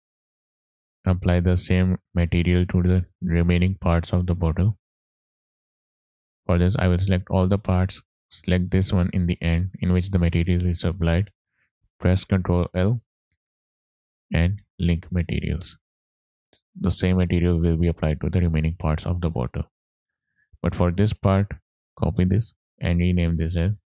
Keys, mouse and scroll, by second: 0.0 middle click, 0.3-0.6 drag, 0.9 scroll up 3, 1.2-2.1 shift+middle drag, 3.5 click, 6.7 click, 7.5 shift+click, 8.4 ctrl+click, 12.4 ctrl+l, 17.9 click, 18.8 click, 19.4 click, 19.9 click, 20.8 click, 23.1-23.9 drag.